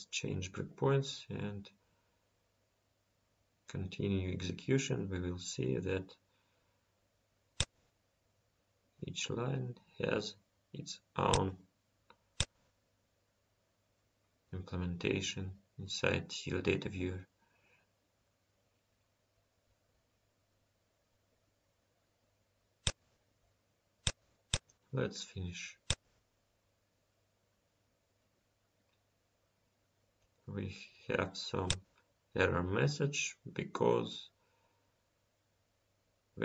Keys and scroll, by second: 7.6 F5, 13.3 F5.